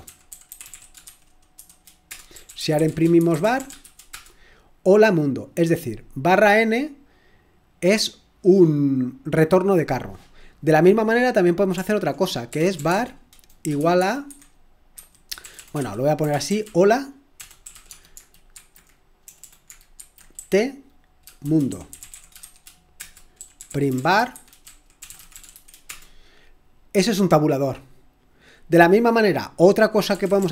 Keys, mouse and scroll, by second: 0.0-4.3 typing, 7.3 click, 10.4 click, 12.3-26.0 typing, 23.0 Return, 29.9-30.5 typing.